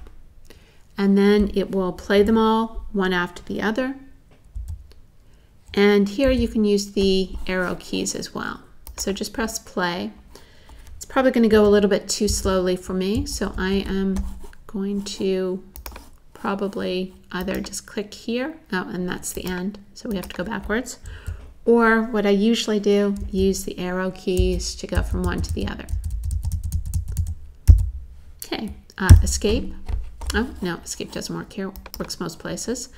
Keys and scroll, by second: 4.6 Right, 6.3 Right, 11.5 Right, 21.1 Left, 23.2 Left, 24.4 Left, 25.3 Left, 26.6 Left, 29.1 super+z.